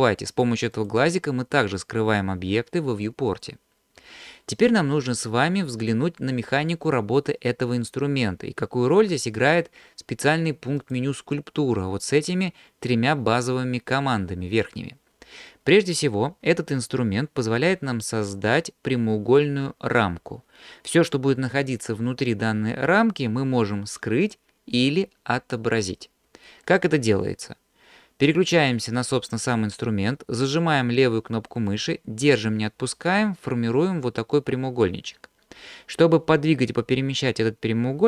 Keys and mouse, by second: 0.3 click, 0.8 click, 11.0-14.7 drag, 31.8-38.0 drag.